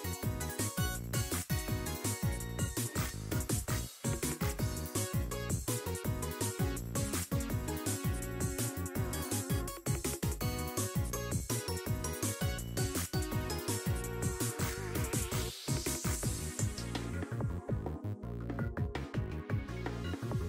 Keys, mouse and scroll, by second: 3.2-3.7 scroll down 1, 3.7-5.8 drag, 6.1 click, 7.5 click, 8.1-9.0 scroll up 6, 8.3 middle click, 8.8 middle click, 9.4 click, 11.4-12.1 scroll down 7, 12.5 click, 14.5-15.2 scroll up 3, 16.2-17.4 drag, 19.2-20.3 scroll down 4, 19.7-20.3 scroll up 1, 20.3 r.